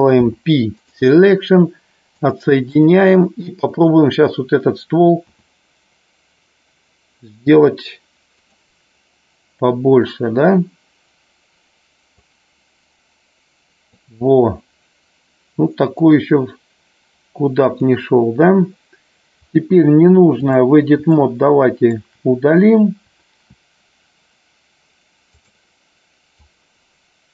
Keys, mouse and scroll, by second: 2.1-2.9 drag, 3.6 click, 12.2-14.0 drag, 15.9-17.8 drag, 19.5-20.5 drag, 21.1 shift+middle click, 25.2 click, 26.2-27.3 drag.